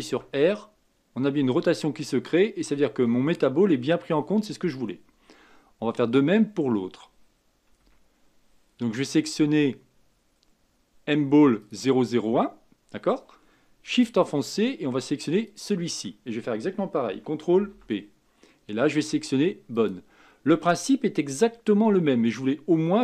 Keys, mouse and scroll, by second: 0.1 r, 7.8 a, 11.6 click, 15.4 shift+click, 17.5 ctrl+p.